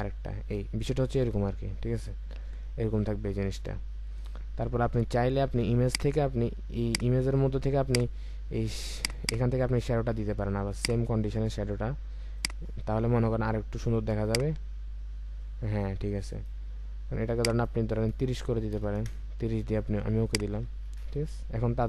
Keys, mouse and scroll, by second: 2.9-3.9 alt+scroll up 1, 9.1 double click, 18.6 typing, 19.0 Return, 20.7-21.4 alt+scroll down 1, 21.6-21.8 alt+scroll up 1.